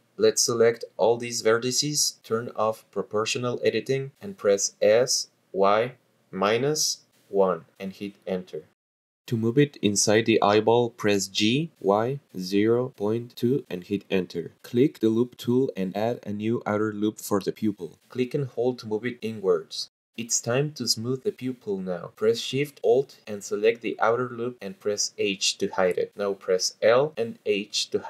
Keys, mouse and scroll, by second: 2.2 shift+click, 4.6 click, 5.1 s, 6.0 y, 7.7 KP_Subtract, 8.1 KP_1, 9.0 Return, 10.1 g, 11.8 y, 12.3 KP_0, 12.9 ., 13.5 KP_2, 14.4 Return, 14.8 click, 15.7 click, 17.1 click, 20.8 click, 23.0 click, 23.9 alt+shift+click, 25.3 h, 27.1 click, 28.0 l.